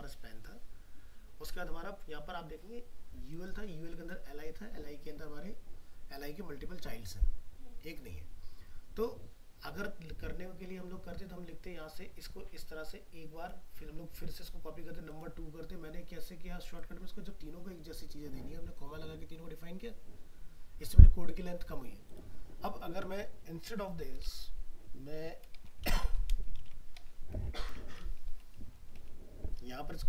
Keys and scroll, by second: 25.8 ctrl+c, 26.6 ctrl+v.